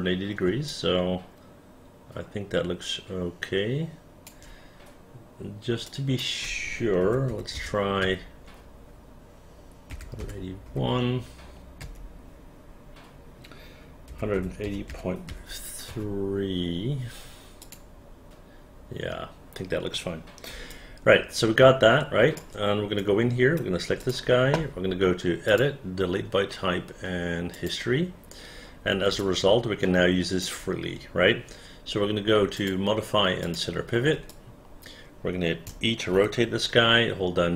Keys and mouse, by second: 0.8-4.4 alt+drag, 6.0 click, 7.1 KP_1, 7.4 KP_8, 7.7 KP_2, 8.1 Return, 10.1 KP_1, 10.3 KP_8, 10.8 KP_1, 12.1 Return, 14.2-15.4 typing, 16.0 Return, 17.7 click, 20.9-22.5 alt+drag, 23.1-24.1 right drag, 24.1 click, 27.7 click, 29.3-30.6 alt+drag, 34.5-35.8 alt+drag, 36.3 e.